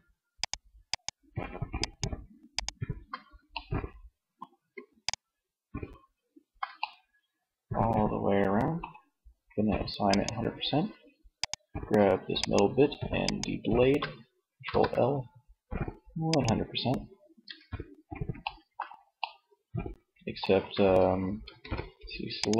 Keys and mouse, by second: 0.9 shift+click, 2.6 middle click, 13.8 ctrl+l, 16.4 Tab, 19.8 Tab, 20.6 a.